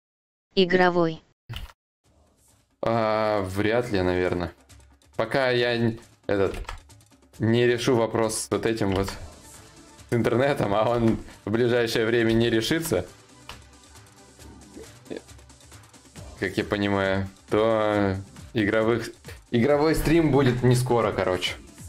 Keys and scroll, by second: 1.1 ctrl+z, 1.1 ctrl+y, 6.1 ctrl+z, 10.5 ctrl+z, 11.9 ctrl+shift+z.